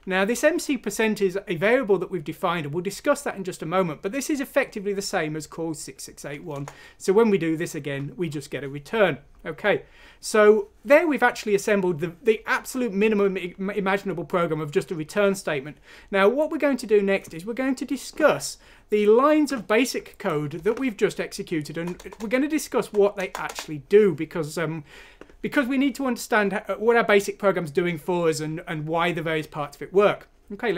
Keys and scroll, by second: 6.5 Return, 20.6 Return, 21.0 Return, 21.1 Return, 21.1 Return, 21.2 Return, 21.3 Return.